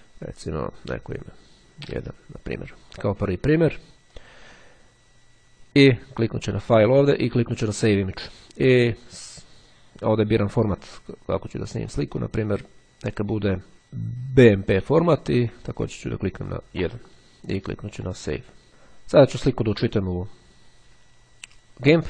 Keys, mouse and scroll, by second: 1.0 1, 3.9-4.9 drag, 6.4 click, 7.8 click, 10.3 click, 14.3-15.4 drag, 15.7 1, 18.5 click, 20.1 click.